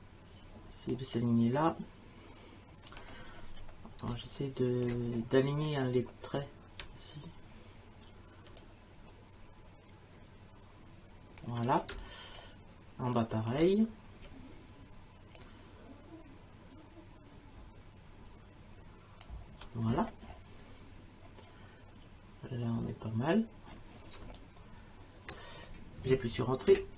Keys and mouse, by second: 4.1 space, 4.3 click, 8.6 click, 11.9 space, 12.0 click, 13.2 click, 15.4 click, 24.2 space, 24.4 click, 25.3 click, 26.7 Return, 26.7 KP_Enter.